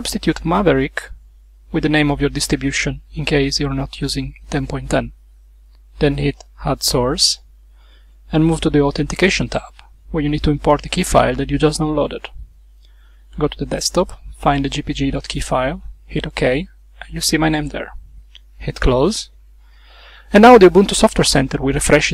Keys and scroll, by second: 0.0-2.2 typing.